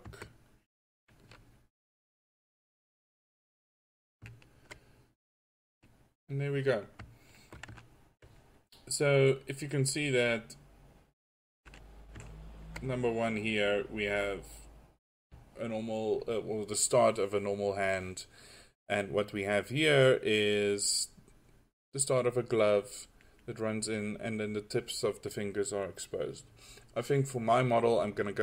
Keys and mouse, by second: 1.4 f, 6.9 middle click, 23.3-26.9 middle drag.